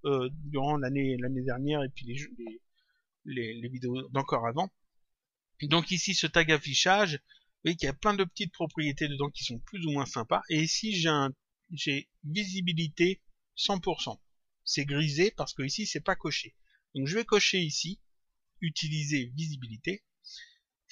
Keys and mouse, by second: 5.5 click, 18.4 click.